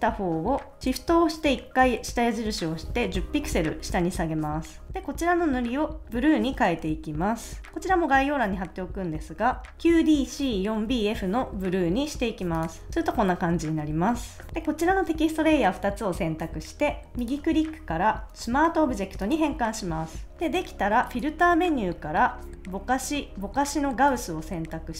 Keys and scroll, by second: 1.8 shift+Down, 12.9 super+s.